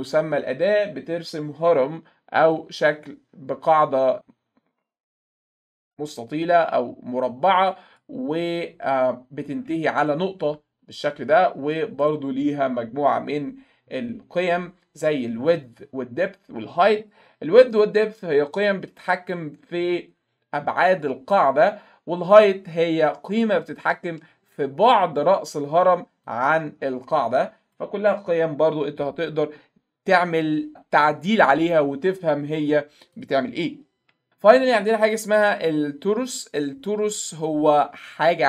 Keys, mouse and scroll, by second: 2.5-8.0 drag, 9.4 click, 10.1-11.3 middle drag, 12.0 right click, 13.1 click, 18.5-19.3 drag, 19.9 click, 24.0 alt+middle click, 24.4 middle click, 26.3-27.7 drag, 33.2 click, 35.1 click.